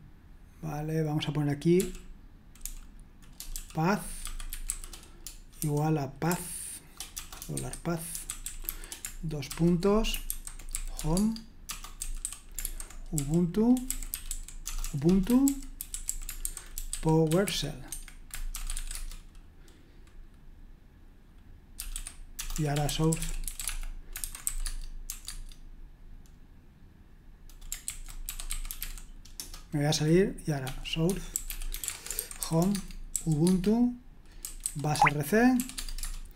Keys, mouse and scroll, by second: 1.8-19.4 typing, 21.6-25.3 typing, 27.9 ctrl+c, 28.0-29.3 typing, 29.3 Return, 30.4-36.0 typing.